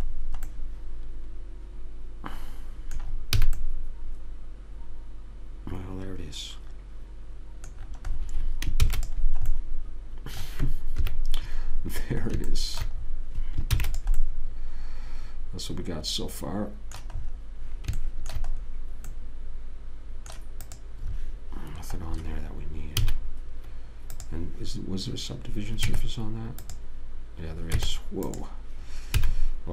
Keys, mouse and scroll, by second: 3.8 a, 3.9-4.9 middle drag, 9.2 ctrl+s, 11.4 KP_3, 14.1 ctrl+s, 19.0-21.0 middle drag, 21.0 click, 23.3 a, 24.5 click, 26.2 Tab, 28.1 Tab, 29.5 a.